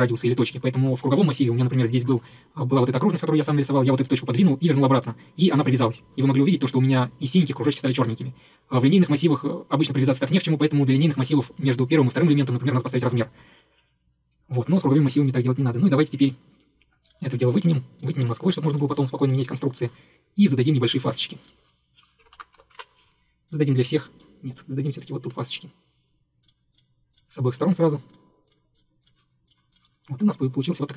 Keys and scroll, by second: 22.1-23.2 typing.